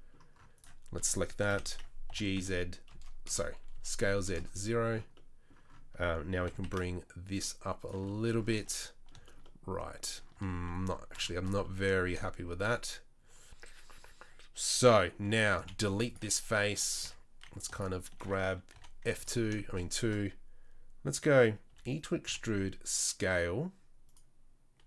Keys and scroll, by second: 1.5 o, 2.1 g, 3.7 s, 6.4 g, 8.5 Tab, 10.3 Tab, 15.6 Delete, 16.7 3, 17.0 2, 21.7 e, 22.2 s.